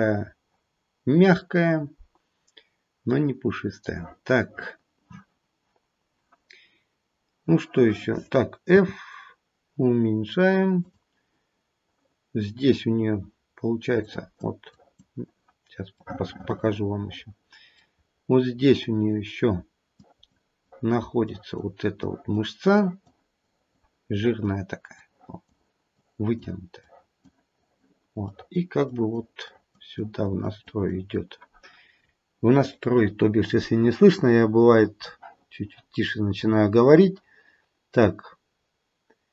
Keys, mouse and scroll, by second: 8.9 f, 14.0 click, 14.6 click, 16.0 middle click, 16.3 middle click, 16.6 middle click, 17.9-19.6 scroll up 2, 19.9 click, 20.7 click, 22.0 click, 22.7 click, 23.5 click, 24.1 click, 24.9 click, 25.9 click, 26.8 click, 27.5 click, 28.1 click, 29.5 click, 29.9 click, 30.4 click, 30.8 click, 32.0-33.8 scroll down 2, 33.8-35.4 scroll down 2, 35.4-36.3 scroll down 2, 36.3-39.3 scroll down 8.